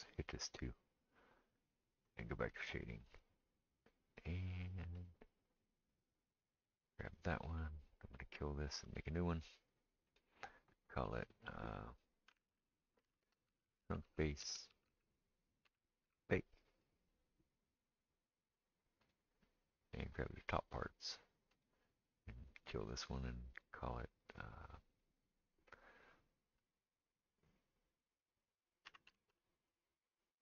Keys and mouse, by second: 0.3-2.3 drag, 2.3-3.5 middle drag, 3.5 click, 3.6-5.0 middle drag, 5.0 click, 5.1-6.7 middle drag, 6.7 click, 6.8-8.1 middle drag, 8.1-20.6 drag, 20.6-21.6 middle drag, 21.6-30.4 drag.